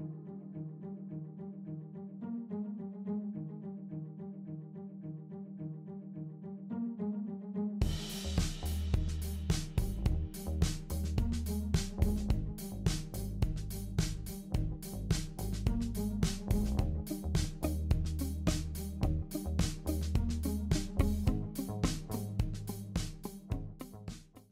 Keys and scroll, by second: 10.9 super+c, 11.0 super+v, 12.7 super+v.